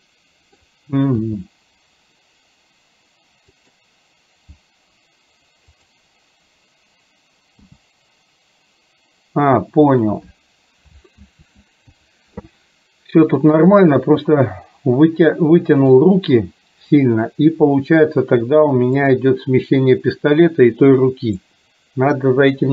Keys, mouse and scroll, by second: 0.0 middle click, 1.4 g, 5.9 click, 7.6 g, 11.3 ctrl+z, 13.6-16.0 drag, 19.1-21.5 drag.